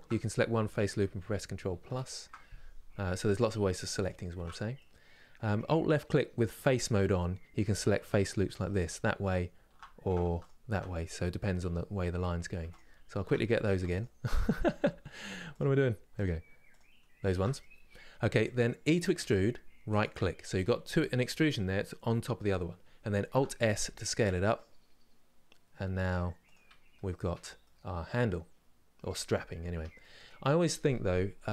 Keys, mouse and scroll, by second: 1.5 ctrl+KP_Add, 3.7 alt+shift+click, 4.4-8.4 middle drag, 8.4 alt+click, 10.1 alt+click, 12.4 alt+shift+click, 16.4 alt+shift+click, 17.3-18.9 middle drag, 18.9 e, 26.7 scroll down 1, 27.0 Tab, 27.3-29.0 middle drag, 29.0 scroll up 2, 29.4 Tab, 29.7-31.4 middle drag, 31.4 2.